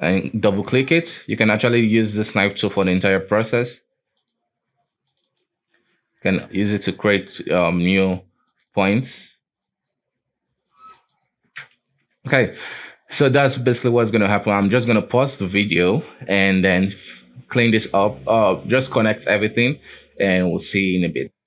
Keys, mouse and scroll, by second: 12.9-13.5 scroll down 4, 13.5 scroll down 1, 13.8-14.1 scroll up 1, 14.1 shift+middle click, 14.7-15.1 scroll down 2, 17.8-18.9 scroll down 2, 19.8 shift+middle click, 20.2-21.4 scroll up 2.